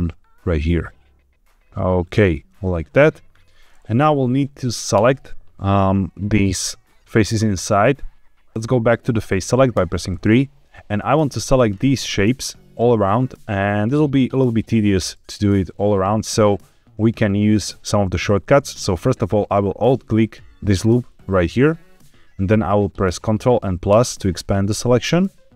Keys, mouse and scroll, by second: 2.0 shift+click, 4.9 KP_7, 8.5 ctrl+z, 8.5 3, 9.7 3, 10.8 click, 11.1 shift+click, 11.5 shift+click, 19.9 alt+click, 23.8 ctrl+KP_Add.